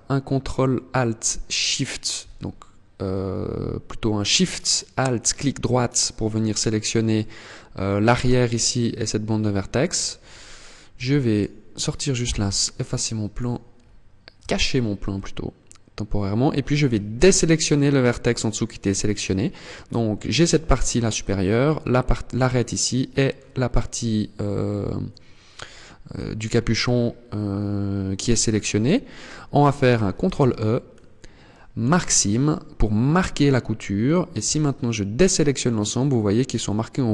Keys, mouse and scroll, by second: 1.1 alt+shift+right click, 5.7 middle click, 6.7 middle click, 7.5 middle click, 9.0-10.4 scroll down 9, 10.4 Tab, 10.7 right click, 11.7 h, 12.8 right click, 13.3 scroll up 2, 13.9 Tab, 14.6 middle click, 16.7 shift+right click, 17.7 scroll up 2, 21.9 middle click, 25.1 scroll down 4, 25.5 scroll up 3, 29.7 ctrl+e, 32.5 scroll up 3, 33.6 scroll down 2, 33.9 a, 34.6 middle click, 36.8 middle click.